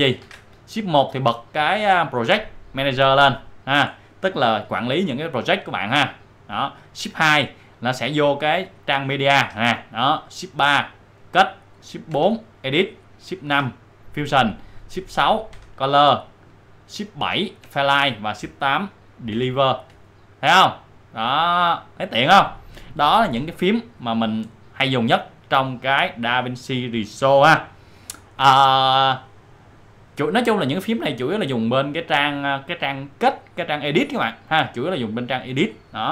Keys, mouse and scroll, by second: 0.2 shift+1, 6.5 click, 7.6 click, 9.4 shift+2, 10.5 shift+2, 12.1 shift+4, 13.5 shift+5, 15.5 shift+6, 17.6 shift+7, 19.3 shift+8, 21.5 click, 24.4-30.0 drag, 30.0-36.1 drag.